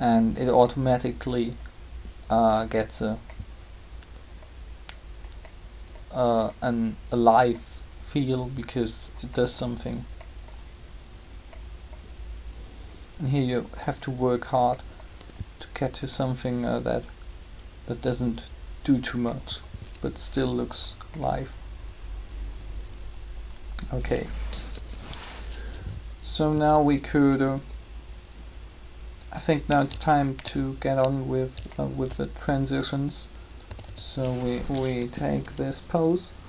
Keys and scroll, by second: 24.6 3, 33.7 typing, 34.8 Down.